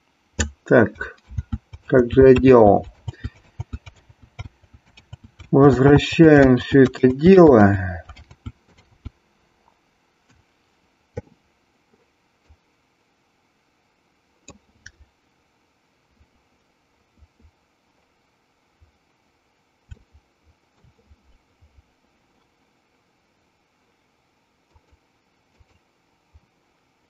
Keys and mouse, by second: 1.5 ctrl+z, 1.9 ctrl+z, 2.5 ctrl+z, 3.0 ctrl+z, 3.7 ctrl+z, 4.7 ctrl+z, 5.2 ctrl+z, 5.6 ctrl+z, 6.0 ctrl+z, 6.6 ctrl+z, 7.1 ctrl+z, 7.6 ctrl+z, 8.3 ctrl+z, 8.9 ctrl+z, 12.5 click, 19.9-20.9 shift+middle drag, 24.6 click, 25.7 click.